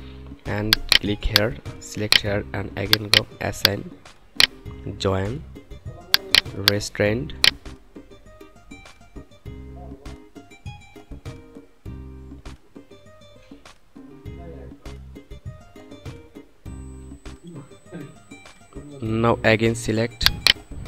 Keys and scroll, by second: 16.7 F9.